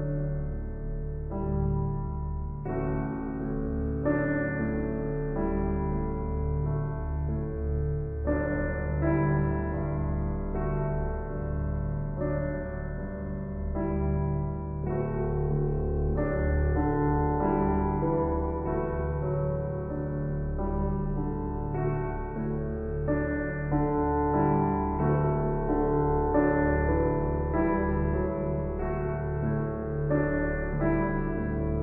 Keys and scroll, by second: 21.7 ctrl+j.